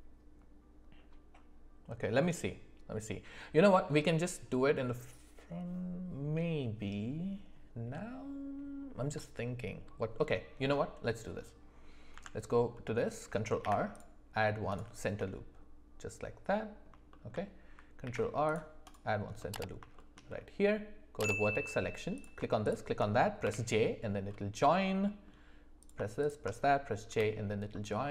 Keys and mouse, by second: 12.1 Tab, 13.6 ctrl+r, 15.2-16.8 middle drag, 17.1 shift+middle click, 18.0 ctrl+r, 19.4 middle click, 19.9 middle click, 21.2 click, 22.6 shift+click, 24.2 j, 24.7 middle click, 27.0 j, 27.7-28.1 middle drag.